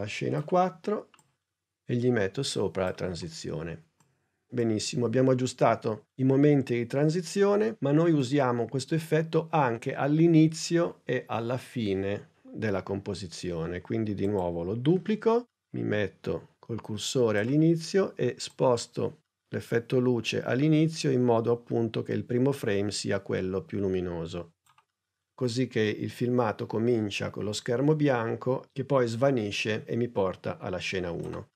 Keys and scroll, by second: 14.9 super+d.